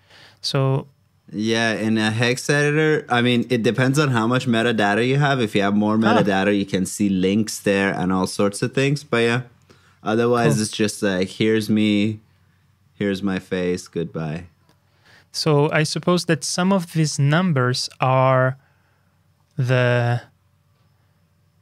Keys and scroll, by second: 4.6 super+b.